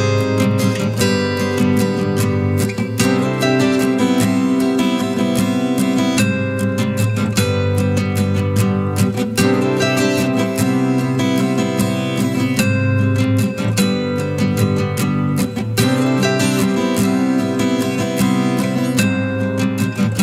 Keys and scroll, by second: 10.5 ctrl+t.